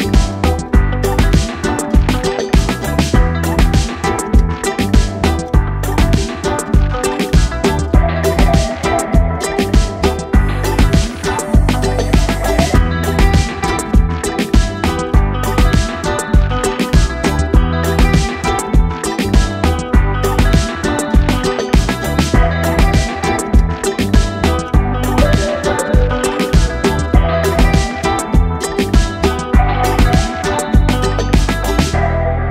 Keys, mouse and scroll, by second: 0.6 click, 1.7 click, 7.2 click.